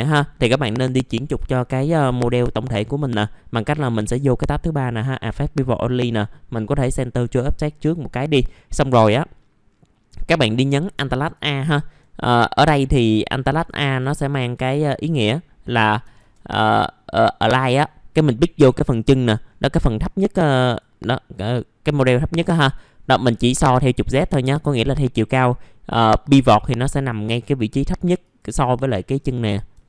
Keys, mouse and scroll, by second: 19.4-20.8 scroll up 1, 20.8 click, 29.0 middle click, 29.0 scroll down 1.